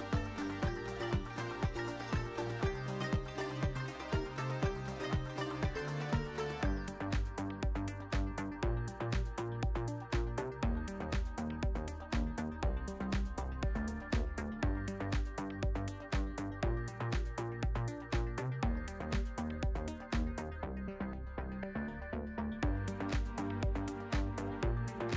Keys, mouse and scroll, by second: 0.8 click, 2.9-7.0 drag, 18.5 click, 19.4-20.4 drag, 22.6 drag, 24.1 drag, 24.8-25.1 drag.